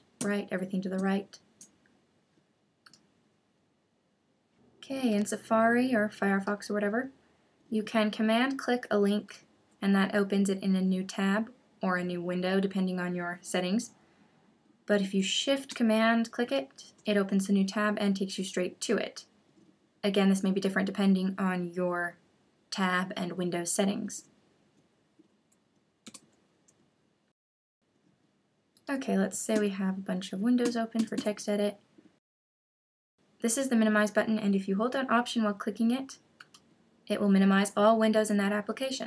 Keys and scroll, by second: 1.0 shift+super+Up, 26.0 super+h, 29.5 super+n.